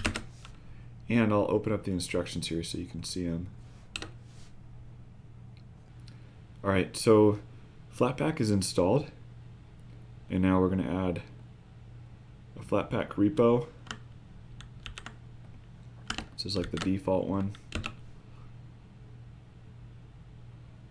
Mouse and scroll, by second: 1.5-10.6 drag, 13.1-20.9 drag.